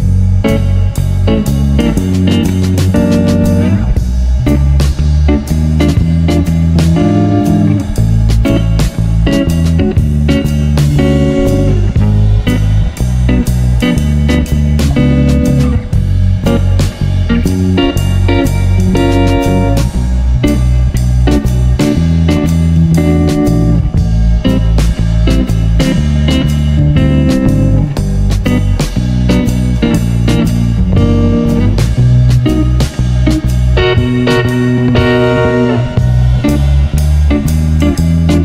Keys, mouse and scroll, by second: 1.4-3.9 drag, 5.3-7.4 drag, 7.7 0, 8.5-10.6 drag, 14.2-16.3 drag, 17.2 0, 18.5-20.6 drag, 21.8 scroll up 2, 22.1 click, 23.3 click, 23.6-26.3 drag, 27.3 click, 27.9 click, 31.5-34.8 drag, 37.8-38.4 drag.